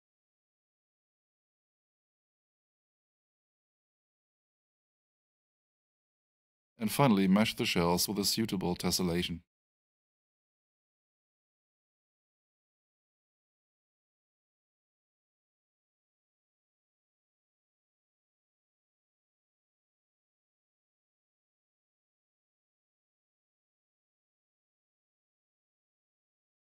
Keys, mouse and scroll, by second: 3.1 right click, 11.3 click, 13.5-15.4 typing, 16.9 Return, 21.3 click, 23.4 click.